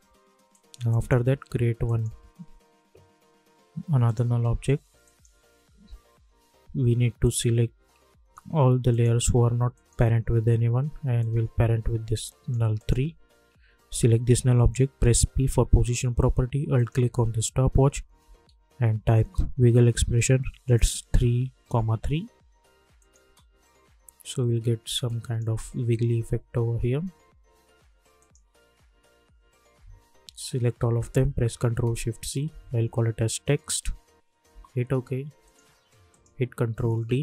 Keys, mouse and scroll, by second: 0.9 right click, 1.8 click, 1.9 click, 4.0 click, 7.2 ctrl+click, 8.9-12.8 ctrl+drag, 15.1 p, 16.7 alt+click, 17.7-18.9 typing, 19.2 Return, 20.7-21.6 typing, 23.0 click, 23.2 space, 25.0 click, 25.4 space, 27.4 space, 28.1 click, 28.5-29.1 typing, 30.7 ctrl+a, 32.1 ctrl+shift+c, 32.8-34.0 typing, 34.5 Return, 35.4 click, 36.9 ctrl+d.